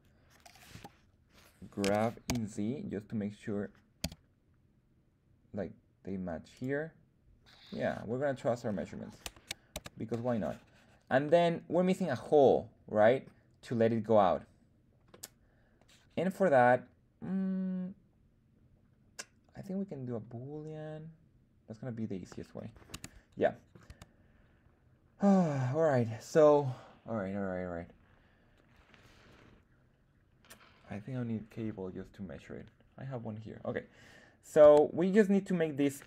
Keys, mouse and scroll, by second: 0.6 KP_1, 1.8 g, 2.2 alt+z, 3.9 z, 6.4 click, 7.5-8.6 scroll up 1, 8.6 scroll down 1, 8.8 scroll down 1, 9.5 scroll down 2, 9.7 Tab, 11.2-11.6 middle drag, 12.1-13.2 middle drag, 15.0-22.8 middle drag, 23.9 Tab, 23.9 middle click, 25.5-26.0 middle drag, 34.6 Tab, 35.0 middle click.